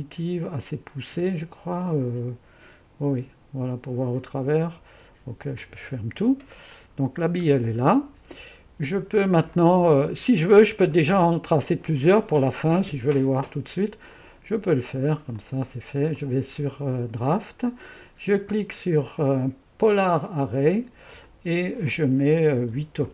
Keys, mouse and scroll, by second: 5.5-7.5 drag, 7.5-9.5 middle drag, 9.5-10.7 drag, 11.5 click, 14.1-15.1 drag, 15.4 click, 16.2-19.4 drag, 19.9-22.7 drag, 22.4-23.1 typing.